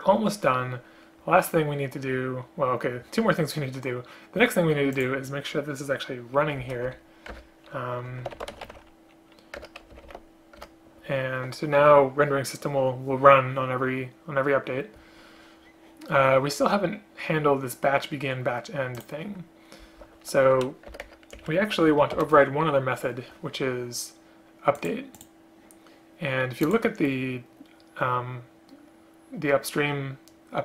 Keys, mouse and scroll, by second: 6.7 shift+Up, 7.0 Delete, 7.5 Return, 9.7 Return, 10.7 Return, 20.6 End, 21.0 Return, 21.1 Return, 21.4 Up, 22.2 ctrl+o.